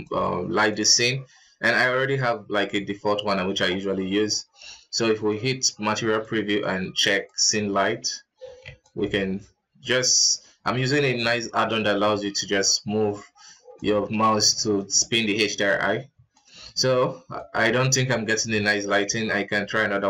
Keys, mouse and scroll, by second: 2.0 right click, 5.2 z, 6.3-20.0 drag.